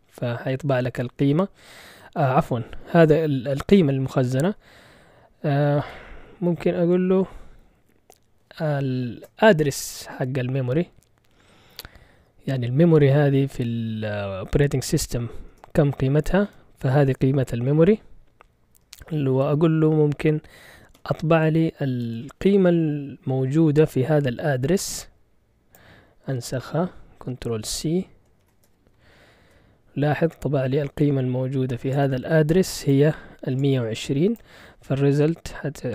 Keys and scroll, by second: 1.7 Left, 2.3 Left, 2.4 Left, 2.6 Left, 2.7 Left, 3.7 BackSpace, 4.0 BackSpace, 4.4 Right, 5.5-7.4 typing, 9.2 shift+7, 15.5 Return, 20.9 x, 22.0 space, 27.5 ctrl+shift+c, 28.4 shift+Insert, 29.4 Return.